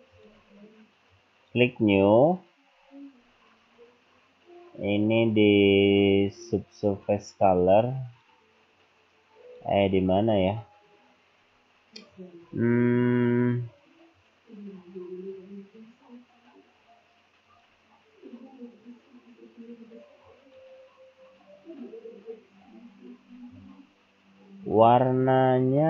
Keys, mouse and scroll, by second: 0.2 click, 1.2 click, 2.8-5.0 scroll down 6, 5.0-5.4 scroll down 1, 6.3 click, 10.2 click, 11.0-12.0 scroll down 5, 12.1-13.9 scroll up 15, 17.5 click, 20.3 click.